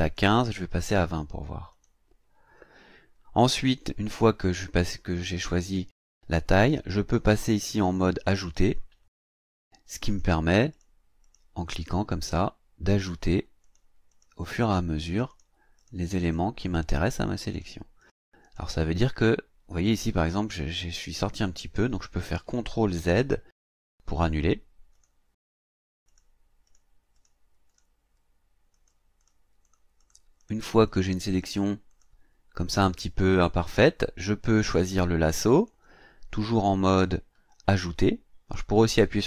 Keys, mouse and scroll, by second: 0.4 click, 1.7 click, 8.5 click, 10.1 click, 10.7 click, 11.2 click, 11.7 click, 12.2 click, 13.0 click, 13.6 click, 14.1 click, 15.3 click, 15.8 click, 16.2 click, 16.6 click, 17.0 click, 17.5 click, 18.0 click, 18.4 click, 19.0 click, 23.1 ctrl+z, 24.9 click, 25.6 click, 26.1 click, 26.6 click, 27.2 click, 27.7 click, 28.7 click, 29.2 click, 29.6 click, 30.4 click, 30.8 click, 31.3 click, 31.9 click, 35.5 click.